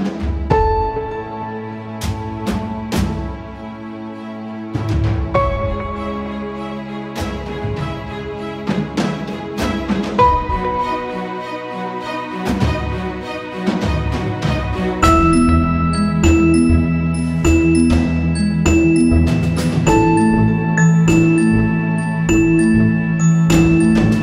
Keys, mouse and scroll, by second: 4.3 right click, 5.1 click, 7.6 click, 11.0-15.0 drag, 15.1 click, 17.6 right click, 18.3 click, 19.6 ctrl+=, 20.3 space, 20.5 click, 20.6 space, 21.4 ctrl+-, 24.0 ctrl+-, 24.1-24.2 shift+drag.